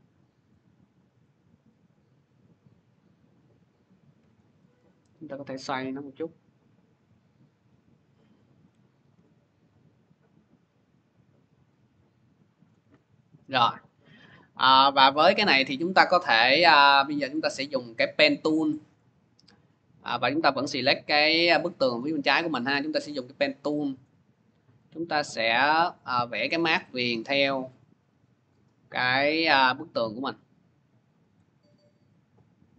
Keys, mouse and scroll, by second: 4.1 click, 4.6 w, 8.2 click, 8.8 v, 12.4 click, 13.6 scroll, 14.9-15.6 scroll, 17.2 middle click, 17.3 click, 18.8 middle click, 20.6 click, 22.5 click, 23.2 click, 23.9 click, 24.6 click, 25.3 click, 25.9 click, 26.5 click, 27.0-31.7 drag.